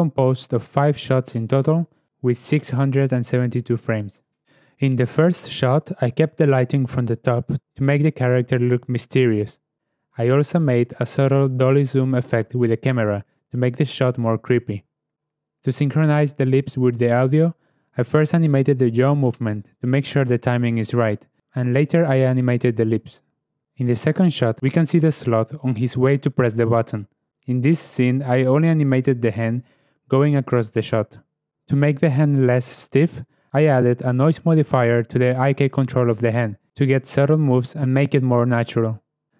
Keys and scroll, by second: 10.0 shift+Left, 11.0 shift+space, 20.8 shift+s, 23.6 shift+Left, 25.7 ctrl+space, 27.2 shift+Left, 30.4 shift+Left, 33.4 Return, 34.1 ., 34.3 Return, 36.2 ., 36.4 0, 36.6 1, 36.6 Return, 38.1 shift+space.